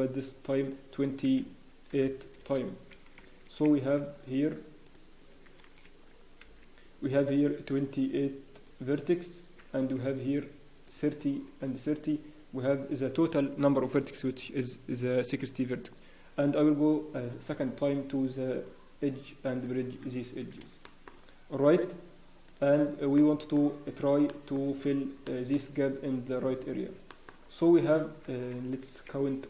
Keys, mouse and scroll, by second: 3.2 Escape, 4.8 click, 5.6 alt+a, 6.4 b, 17.5 click, 18.5 right click, 20.5 scroll down 1, 20.8 shift+middle click, 21.1 scroll up 1, 22.4 click, 23.1 shift+middle click, 24.3 shift+middle click, 24.6 scroll up 1, 25.2 shift+middle click, 26.7 scroll down 1, 27.1 shift+middle click, 27.1 scroll up 2, 27.3-27.8 scroll, 27.8 click, 27.8-28.6 scroll down 2, 28.8 alt+a.